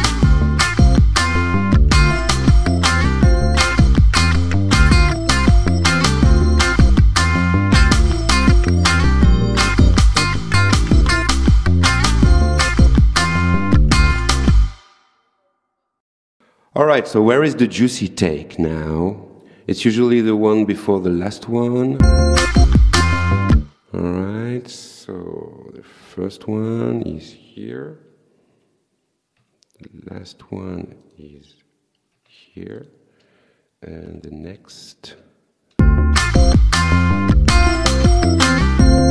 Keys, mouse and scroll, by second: 22.0 space, 23.6 space, 24.7 click, 31.1 click, 32.8 click, 35.8 space.